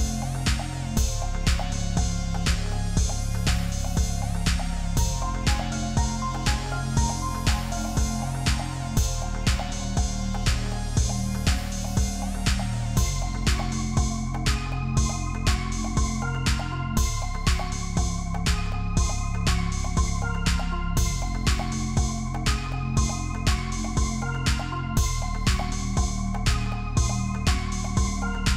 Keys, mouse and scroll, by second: 1.5-2.6 alt+scroll up 10, 3.5 Return, 3.8-4.2 alt+scroll down 5, 5.8 space, 9.2 ctrl+t, 19.3 ctrl+t, 21.3 double click, 22.4 ctrl+t, 24.7 Return, 25.2 alt+scroll down 1, 26.0-27.6 scroll up 2, 28.1 typing.